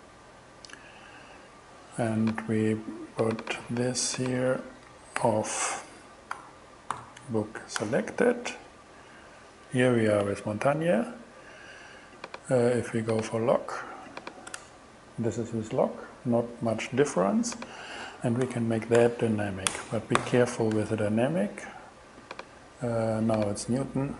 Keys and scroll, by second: 3.5 super+c, 4.3 super+v, 4.9 alt+super+v, 5.2 alt+super+g, 6.4 $, 7.0 b, 7.8 Return, 8.3 shift+Return, 14.6 shift+Return, 18.5 shift+d, 19.0 shift+y, 19.6 y, 19.7 Return, 20.2 alt+g, 20.7 alt+shift+g, 20.8 alt+shift+Return, 21.4 shift+Return.